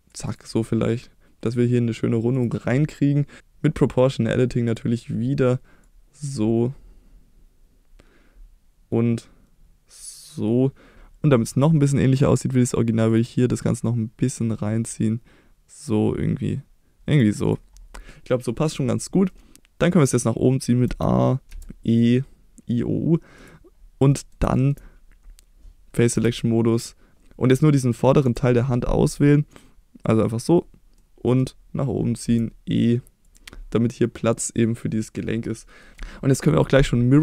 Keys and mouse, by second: 0.3 click, 5.9-17.2 drag, 19.3 middle click, 19.5 a, 20.8 a, 21.5 e, 23.4 click, 24.1 middle drag, 24.5 shift+middle drag, 26.1 3, 28.2 KP_7, 29.6 click, 30.9 middle click, 32.2 e, 33.2 click, 33.7 middle click, 35.2 middle click.